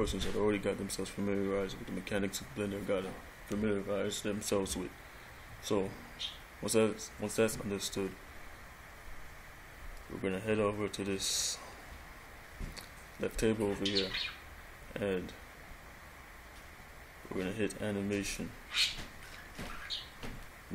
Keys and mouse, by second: 18.4 click.